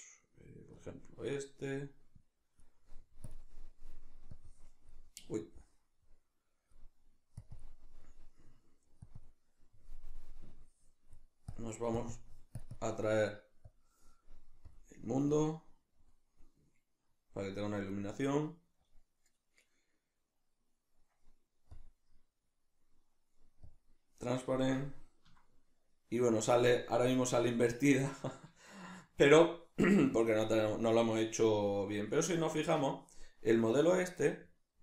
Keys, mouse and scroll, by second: 15.3 click, 17.2-18.8 middle drag, 18.8 click, 21.7-23.8 drag, 24.6-34.8 middle drag.